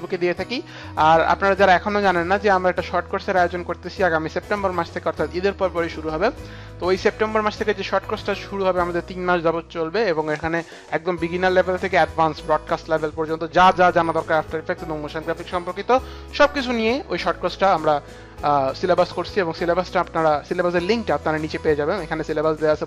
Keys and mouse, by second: 1.0 click.